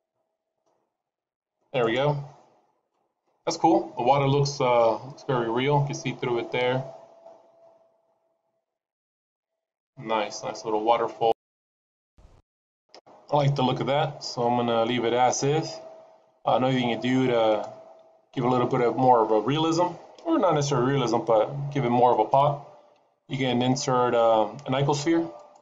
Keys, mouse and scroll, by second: 19.4 scroll up 2, 20.3 scroll down 1, 22.9 shift+a.